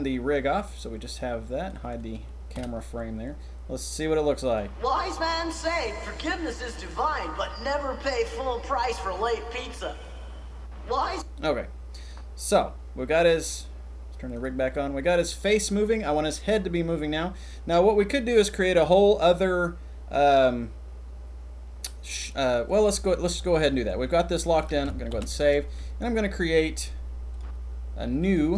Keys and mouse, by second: 0.6 click, 2.5 h, 11.0 click, 12.0 click, 25.2 ctrl+s, 27.3 drag, 28.2 click.